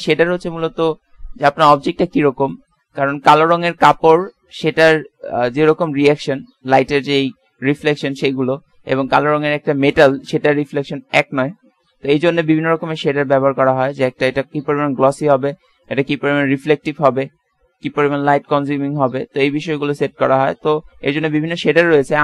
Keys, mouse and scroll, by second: 0.6 shift+a.